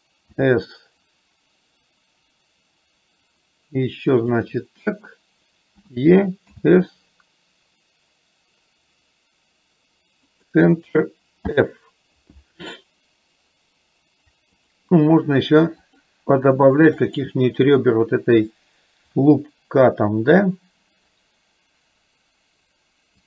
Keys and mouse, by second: 14.7 click, 16.1 click, 17.2 click.